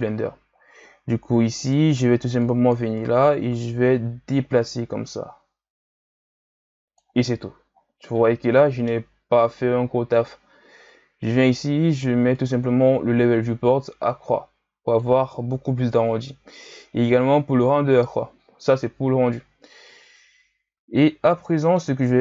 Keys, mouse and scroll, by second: 0.9-1.6 scroll up 3, 1.6 right click, 2.4-5.4 drag, 7.8-9.3 scroll down 3, 9.3 Tab, 11.5-17.9 drag, 18.7-20.9 drag, 20.9-21.3 scroll up 2, 21.3-22.0 middle drag, 22.0-22.2 scroll down 4.